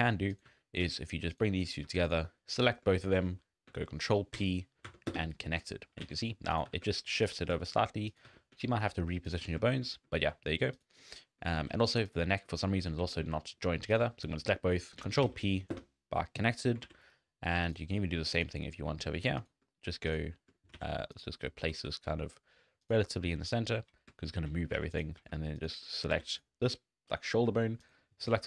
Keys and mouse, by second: 0.5 g, 1.7 click, 4.4 ctrl+p, 6.0 alt+a, 6.5 click, 6.7 g, 7.6 shift+click, 8.1 click, 8.3 g, 9.3 ctrl+click, 9.8 shift+click, 10.1 shift+middle click, 10.7 middle click, 11.0 middle click, 11.5 shift+middle click, 11.7 z, 12.5 click, 12.9 drag, 12.9 z, 13.2 z, 15.2 ctrl+p, 16.5 click, 16.8 alt+a, 17.9 click, 18.6 click, 19.4 shift+click, 20.1 click, 20.6 click, 20.8 alt+a, 21.1 click, 21.9 g, 24.8 alt+a, 25.0 click, 26.1 alt+a.